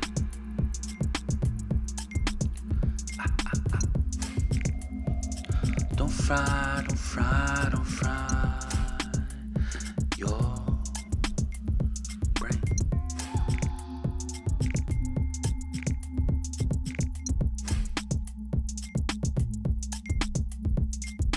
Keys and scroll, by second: 1.1 Return, 9.7 ctrl+z, 11.7 ctrl+g, 12.5-14.7 typing.